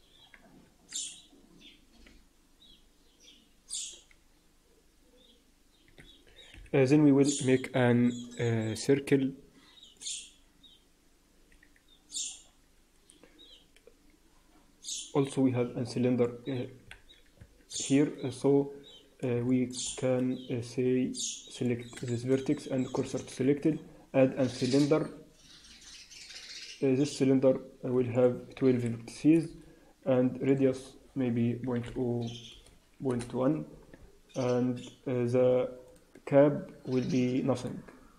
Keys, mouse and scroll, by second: 0.0-0.6 scroll up 4, 0.6 Tab, 0.8-1.7 scroll up 1, 1.8 r, 6.4 KP_1, 6.8-8.9 scroll down 2, 8.9-9.6 scroll down 2, 15.8 click, 16.9 ctrl+z, 17.4 Tab, 17.7 Tab, 19.4 shift+middle click, 19.8 scroll up 4, 21.5 click, 22.0 shift+s, 23.4 shift+a, 28.0 click, 30.4 click, 35.8 click.